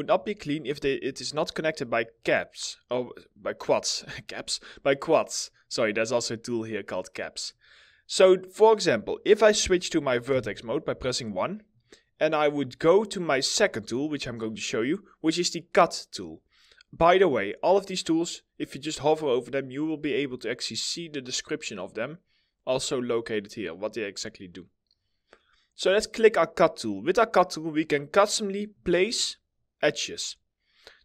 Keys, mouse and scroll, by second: 1.7 scroll up 1, 3.0 middle click, 10.5 1, 11.2 middle click.